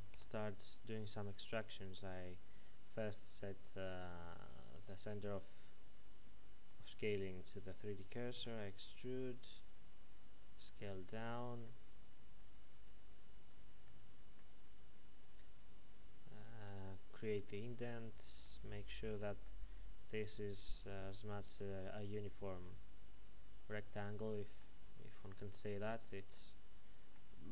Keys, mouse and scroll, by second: 0.1 KP_Decimal, 8.4 e, 11.0 s, 13.5 click, 13.8 middle click, 15.3 click, 16.8 middle click, 18.7-19.1 scroll up 1, 19.6 shift+middle click, 22.6 middle click.